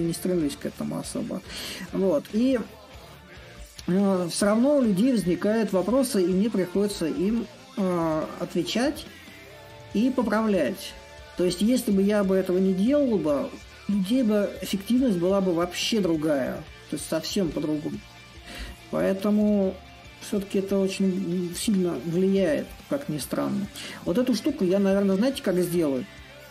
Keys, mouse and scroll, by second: 0.0-5.0 drag, 6.0-9.7 drag, 11.7-16.7 drag, 17.2-19.8 drag, 22.5 click, 22.6-26.5 right drag.